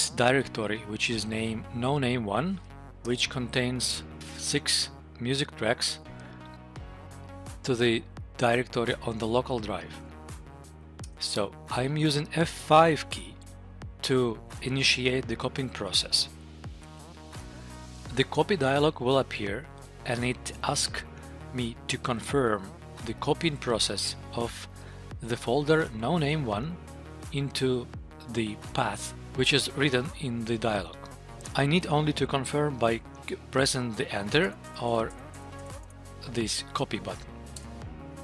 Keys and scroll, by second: 3.0 Return, 11.0 Return, 16.8 F5, 34.5 Tab, 37.5 Return.